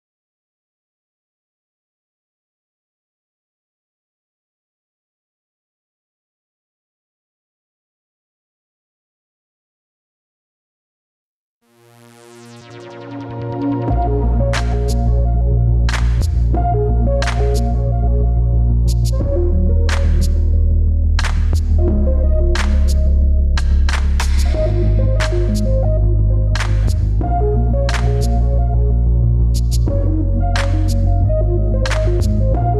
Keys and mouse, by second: 0.5-2.5 middle drag, 3.0 ctrl+KP_Add, 4.3 ctrl+KP_Subtract, 6.7-8.0 right drag, 11.4 click, 11.9 click, 13.3-17.7 drag, 18.0 click, 18.4 click, 18.9 click, 19.1-32.7 drag, 22.1 BackSpace, 26.9 shift+t, 28.7 BackSpace.